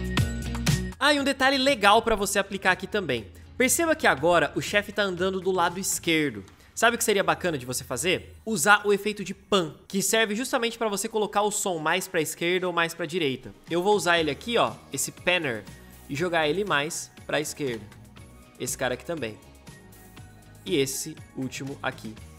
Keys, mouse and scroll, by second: 0.0-0.7 typing, 0.3 alt+click, 0.6 ctrl+middle click, 2.5-3.0 ctrl+middle drag.